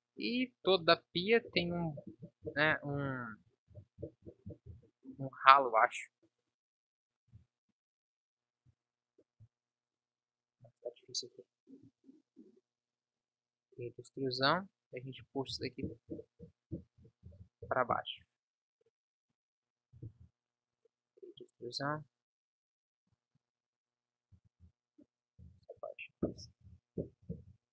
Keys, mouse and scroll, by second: 0.0 Escape, 0.5 middle click, 1.4 KP_7, 3.6 scroll up 1, 4.9 middle click, 5.5-13.5 middle drag, 13.5 e, 15.1 KP_1, 15.4 z, 20.2 ctrl+z, 20.8 e, 23.3 KP_3, 24.6 ctrl+s, 25.6 Delete, 26.7 ctrl+s.